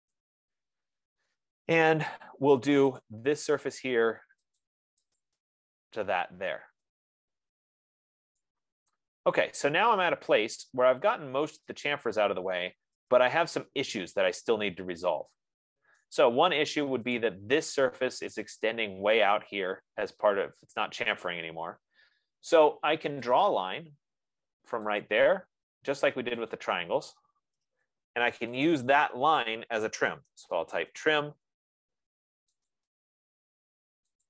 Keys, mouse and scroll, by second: 1.5 scroll, 2.2-2.7 scroll, 2.7-3.0 scroll, 3.5 click, 4.1 right click, 5.1 click, 6.0 click, 7.8-8.9 scroll, 11.5 right click, 12.3-13.0 scroll, 13.2 middle click, 16.3 right click, 17.3 F15, 17.5 click, 23.8 click, 25.6 click, 27.0 click, 28.1 Return, 29.1 click, 30.5-31.6 typing, 33.0 click.